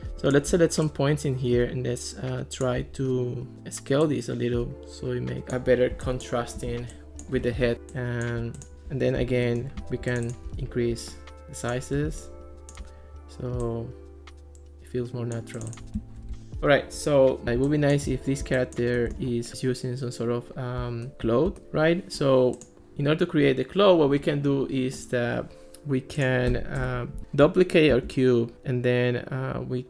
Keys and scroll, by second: 8.7 alt+r, 26.8 BackSpace, 27.9 super+d.